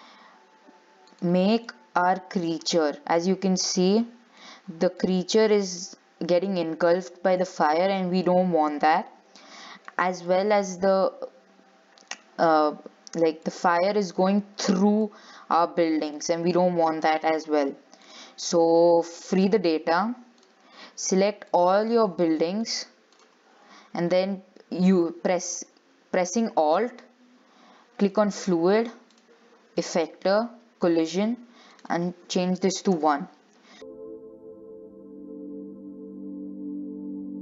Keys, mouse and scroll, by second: 1.3 click, 1.9-3.1 middle drag, 3.1-3.4 scroll up 4, 3.4-4.9 shift+middle drag, 4.9-5.2 scroll up 5, 5.2-7.0 middle drag, 7.0 scroll up 3, 7.6 middle click, 8.5-9.6 scroll down 12, 9.6-13.3 shift+middle drag, 13.3-13.6 scroll down 5, 13.6 middle click, 14.1-14.9 scroll up 5, 14.9-15.3 scroll down 1, 15.3-16.5 middle drag, 16.5-17.4 scroll down 5, 18.3-20.7 drag, 21.7 shift+click, 22.0 shift+click, 22.4 shift+click, 22.8 shift+click, 23.3 shift+click, 28.3-33.9 alt+drag, 34.2-35.5 drag, 35.8-36.8 drag, 37.1-37.4 drag.